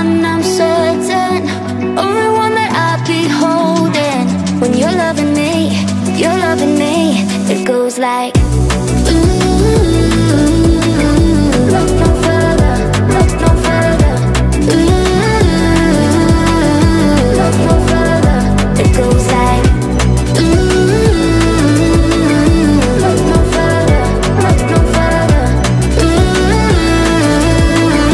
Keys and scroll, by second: 2.5 Delete.